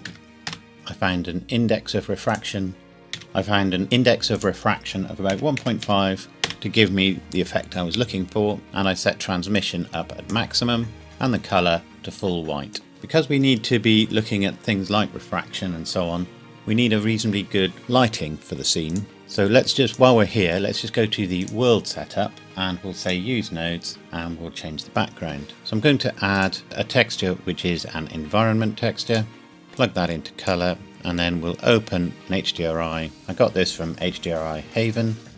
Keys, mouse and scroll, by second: 0.0 KP_0, 0.2 KP_4, 0.5 KP_Enter, 0.7 middle click, 2.3 click, 3.1 KP_1, 3.2 Escape, 4.3 click, 5.3 KP_1, 5.6 KP_Decimal, 5.8 KP_5, 6.4 KP_Enter, 8.6 middle click, 9.6 click, 11.0 shift+middle click, 11.9 click, 19.2-19.7 scroll up 1, 19.8 click, 25.6 scroll up 1, 26.3 click, 29.1 click, 29.8 click, 30.0 click.